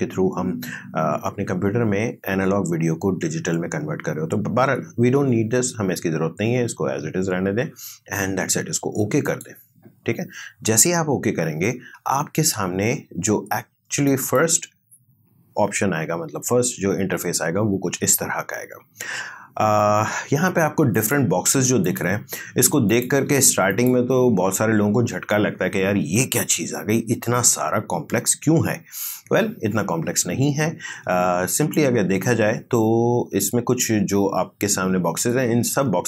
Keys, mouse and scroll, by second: 9.2 click, 14.1 click, 21.0 click, 31.6 click.